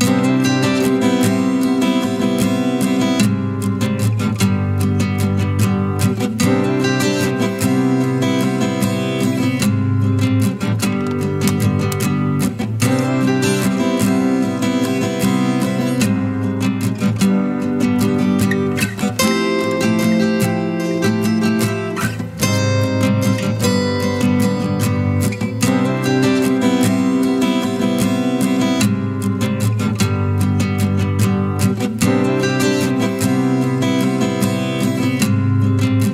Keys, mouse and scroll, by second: 13.1-14.0 typing.